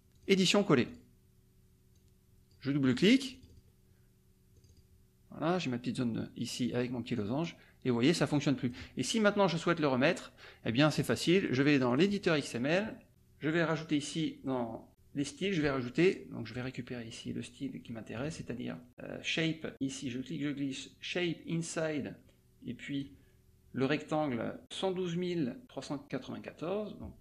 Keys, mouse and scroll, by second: 0.1 click, 0.9 click, 1.9 click, 2.8 click, 3.3 click, 4.5 click, 7.1-8.8 drag, 10.8 click, 11.8 click, 13.6 click, 16.1 click, 16.5 click, 18.1 click, 19.9-23.4 drag.